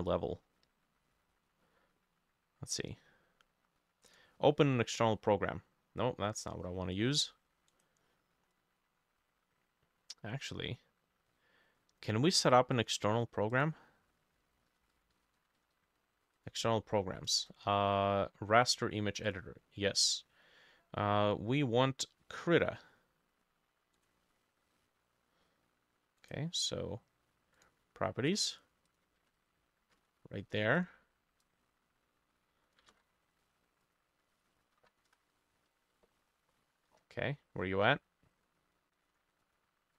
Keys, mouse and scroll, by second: 7.7 right click, 12.8 double click, 14.5-16.3 typing, 24.0 right click, 26.2 right click, 29.3 ctrl+a, 30.0 ctrl+c, 30.1 typing, 32.9 ctrl+c, 33.0 typing, 34.6 ctrl+middle click, 34.7 ctrl+a, 34.8 ctrl+v, 35.1 Return, 36.2-39.0 scroll down 35, 39.5 double click.